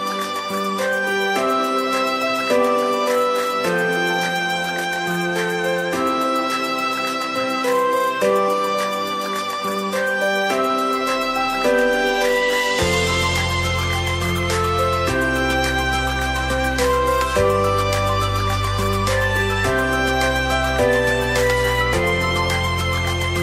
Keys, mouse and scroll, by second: 0.4 Tab, 0.8-2.7 right drag, 2.5 click, 3.3 KP_0, 5.0-7.8 drag, 7.7 n, 8.3-10.7 middle drag, 10.7-11.3 scroll down 2, 11.3-15.0 middle drag, 15.2-16.2 scroll up 5, 16.2 click, 19.8-20.8 scroll up 5, 20.8 shift+click, 22.0 shift+click.